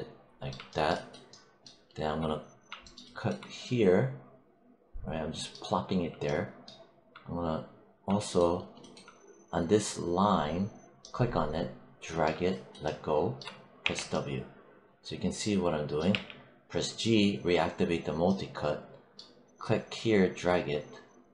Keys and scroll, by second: 13.7 w, 16.0 g.